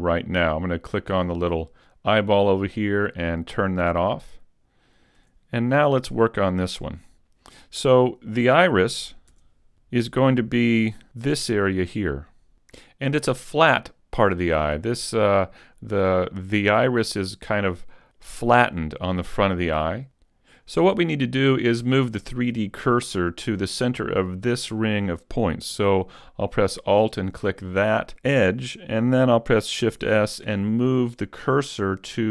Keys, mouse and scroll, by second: 2.8 click, 3.6-4.2 scroll up 1, 4.2 right click, 4.2-5.2 scroll up 1, 5.2 z, 6.1 middle click, 9.3 Tab, 11.1 a, 14.6 middle click, 19.2 middle click, 26.6 alt+right click, 30.0 shift+s.